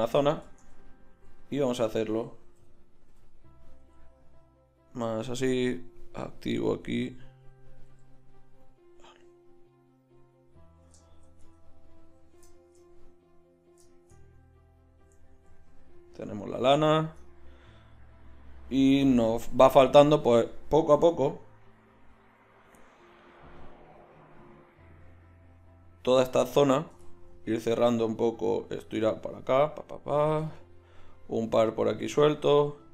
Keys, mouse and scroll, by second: 0.5 Tab, 1.1 s, 2.6 o, 3.1 o, 3.8 s, 7.9 s, 11.4 Tab.